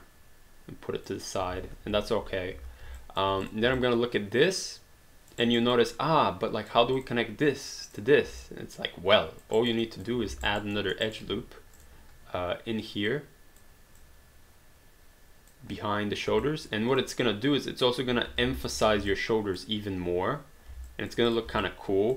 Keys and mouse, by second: 1.9 space, 3.2 alt+click, 3.4 click, 3.8 alt+click, 5.4 alt+right click, 5.8 alt+click, 7.0 click, 8.4 alt+click, 9.6 alt+right click, 9.8 alt+click, 10.4 alt+right click, 10.8 alt+middle click, 11.0 alt+right click, 11.8 click, 13.1 click, 16.4 alt+click, 18.4 alt+d, 18.8 q, 19.1 alt+click, 20.9 alt+click, 21.3 click, 21.6 alt+click.